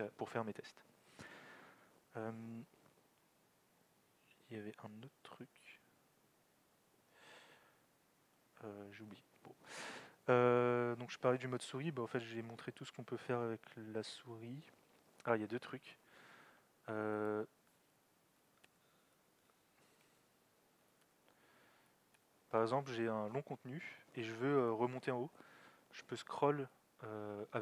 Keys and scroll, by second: 18.2-19.0 typing, 20.6-22.6 typing.